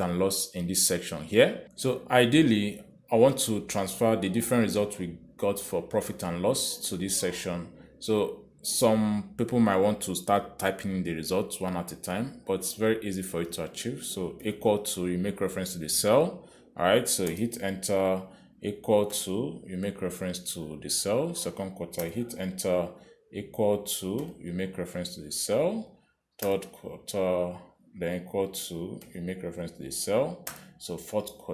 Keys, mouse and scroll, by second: 2.1 click, 15.7 =, 17.8 click, 18.7 Return, 20.4 =, 22.6 click, 23.4 Return, 25.5 =, 27.0 click, 27.8 Return, 30.3 =, 31.2 click.